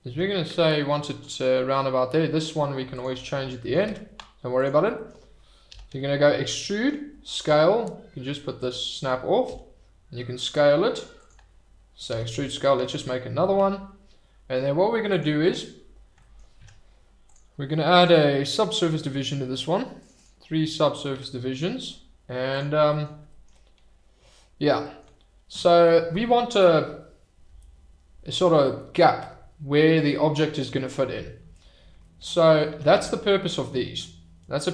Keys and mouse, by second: 0.1 s, 2.9 click, 3.9 Tab, 5.7 e, 5.9 s, 7.4 click, 8.6 middle click, 9.4 s, 11.1 click, 12.1 e, 12.3 s, 15.1 click, 16.6 Tab, 18.0 click, 20.1 click, 21.1 Tab, 22.9 click, 32.7 e, 32.9 s.